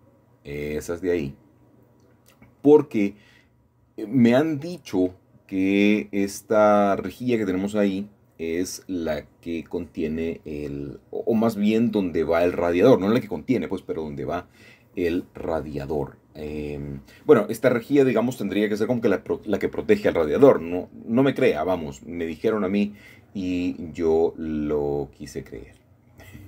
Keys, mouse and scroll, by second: 0.4-1.0 scroll down 1, 1.0 shift+middle click, 1.8-2.4 shift+scroll up 1, 3.1 shift+click, 3.8 shift+click, 4.1 shift+middle click, 5.4-5.9 scroll down 1, 5.9 shift+middle click, 7.1-8.3 shift+middle drag, 8.5-9.7 shift+middle drag, 9.9 d, 10.5 Escape, 11.0 g, 16.3-17.5 shift+middle drag, 17.6 shift+middle click, 18.8 scroll up 1, 21.5 typing, 23.9-24.9 alt+shift+drag, 25.2 alt+shift+click.